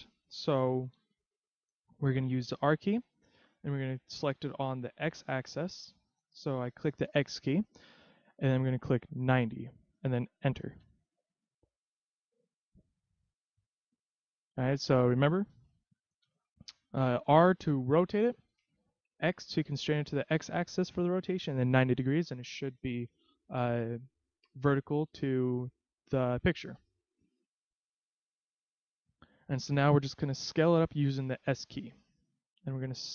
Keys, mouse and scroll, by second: 0.0 click, 1.0 ctrl+z, 2.6 r, 12.6-13.3 scroll up 3, 13.3 scroll down 1, 13.9 middle click, 16.2 KP_3, 24.5 click, 27.1 shift+middle click, 31.8 s.